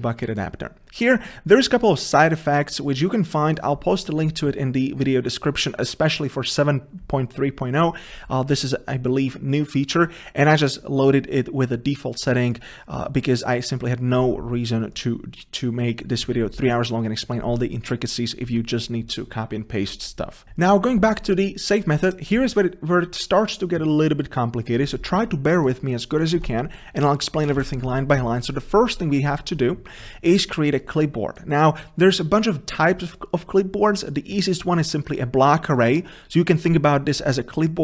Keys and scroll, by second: 27.7 ctrl+v.